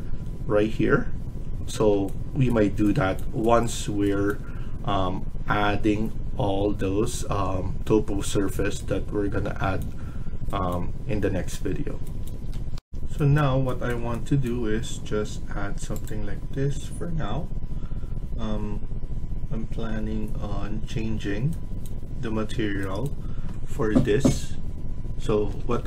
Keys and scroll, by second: 25.2 Escape, 25.6 Escape.